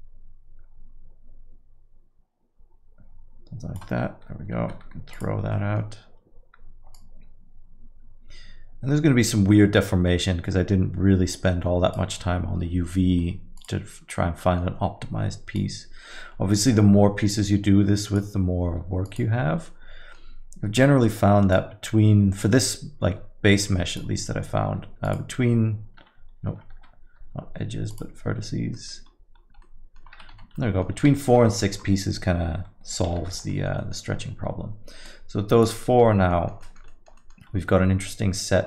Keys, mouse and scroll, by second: 4.6 x, 6.9 middle click, 6.9 click, 13.1 x, 14.4 middle click, 15.6 click, 18.7 x, 19.8 middle click, 21.5 click, 24.7 x, 26.7 ctrl+z, 27.2 x, 28.7 middle click, 29.1-29.8 scroll up 5, 29.6 middle click, 30.0 scroll down 5, 30.5 Tab, 30.6 middle click, 30.9 scroll down 1, 31.2 alt+middle click, 31.5 middle click, 33.3 shift+z, 33.8 alt+middle click, 33.9 middle click, 35.6 click, 36.3 alt+middle click, 36.6 middle click, 36.9 alt+middle click, 37.2 middle click, 37.5 scroll up 2, 37.7 alt+middle click.